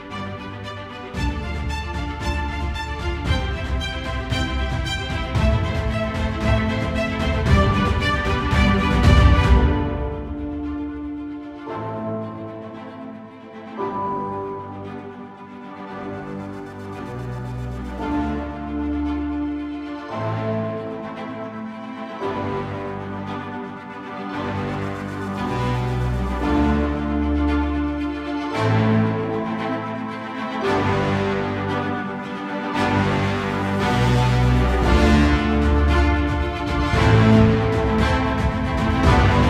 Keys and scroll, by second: 10.2 ctrl+z, 10.6 ctrl+=, 11.7 space.